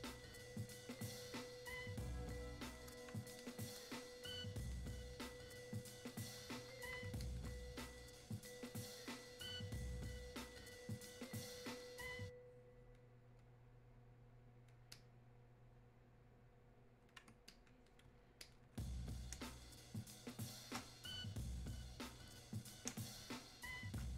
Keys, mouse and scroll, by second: 19.4 space, 20.0 click, 20.3 space, 22.9 space.